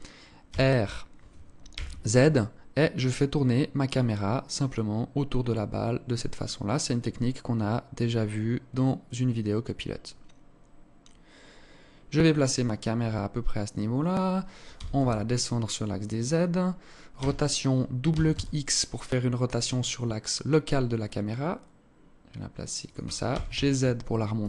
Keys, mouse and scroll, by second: 0.0 r, 12.6-13.1 scroll up 1, 13.1-14.3 scroll up 1, 14.3 g, 16.8 r, 22.8 g.